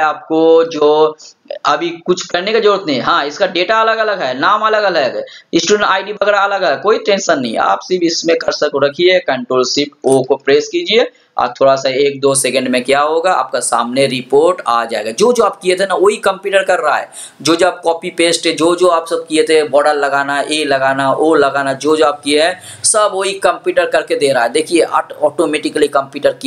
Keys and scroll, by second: 10.1 ctrl+shift+o.